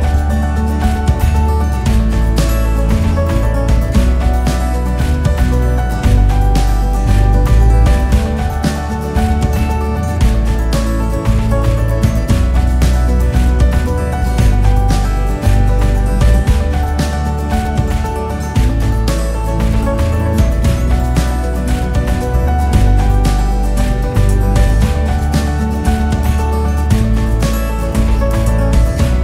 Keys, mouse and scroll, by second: 0.6 g, 4.6-5.4 scroll down 10, 5.4 scroll up 5, 5.8 scroll down 1, 7.0 scroll down 5, 7.1-7.6 scroll up 10, 7.9 scroll down 6, 10.4 scroll down 3, 10.6 scroll up 5, 11.1-11.6 scroll down 1, 11.6 KP_7, 12.1 scroll down 2, 13.8 g, 16.0 KP_0, 17.5 g, 23.7-24.3 scroll up 6, 24.3-25.3 scroll down 2, 25.3-27.7 scroll down 1.